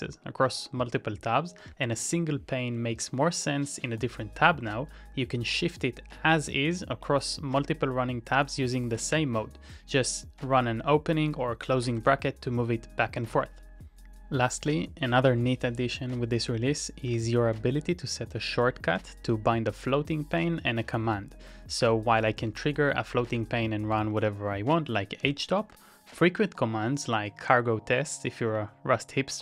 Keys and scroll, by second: 1.6 ctrl+t, 2.0 [, 5.1 Return, 5.1 typing, 12.0 ctrl+t, 13.3 [, 17.0 ctrl+x, 18.5 w, 22.1 ctrl+c, 22.5 ctrl+a, 22.7 ctrl+a, 24.3-25.9 typing.